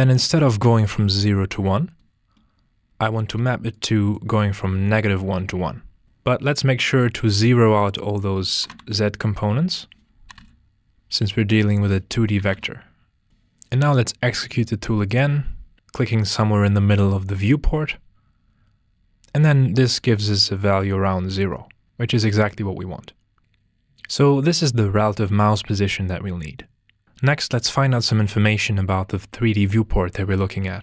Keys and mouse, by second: 0.5 click, 3.2 click, 3.7-5.1 drag, 7.2 click, 7.8 click, 9.7 click, 11.7 click, 14.4-15.7 drag, 23.4 ctrl+s.